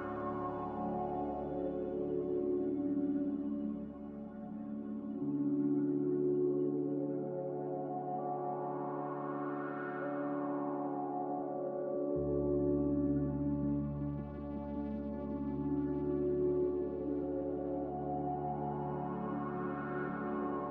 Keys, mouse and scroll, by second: 9.3 f, 11.0 m.